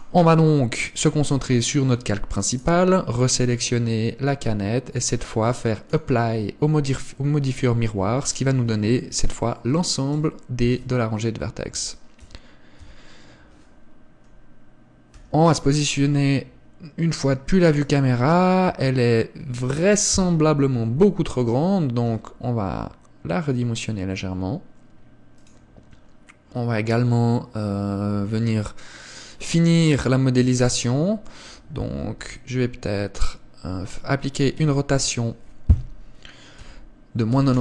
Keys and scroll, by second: 8.1 Tab, 13.0 Tab, 15.3 KP_0, 18.8 Tab, 19.6 Tab, 20.8 KP_1, 22.2 s, 32.2 KP_1.